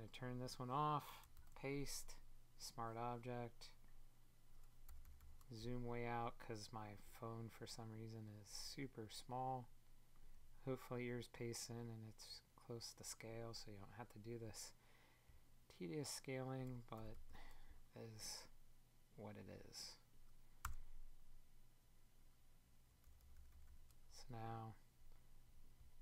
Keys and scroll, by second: 20.5 Return.